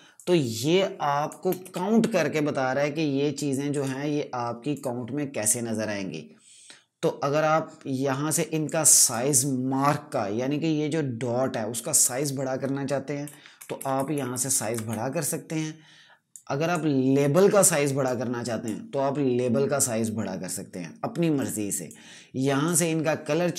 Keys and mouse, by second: 0.1 click, 0.1 space, 1.5 v, 3.6 right click, 4.6 click, 8.5 click, 13.2 shift+Num_Lock, 13.5 shift+Up, 16.2 click, 21.3 click.